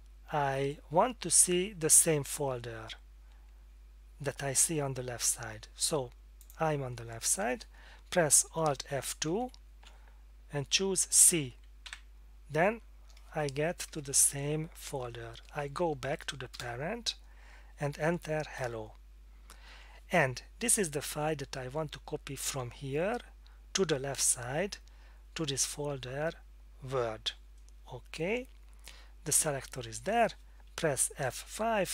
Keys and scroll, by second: 9.3 alt+F2, 11.8 c, 16.5 Return, 17.7 Up, 18.6 Return, 19.7 Down.